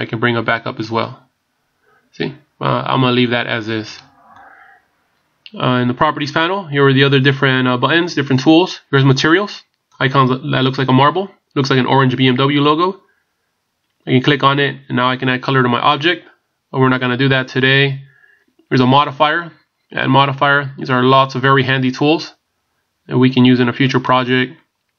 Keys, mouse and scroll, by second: 10.4 click, 18.8 click, 20.0 click.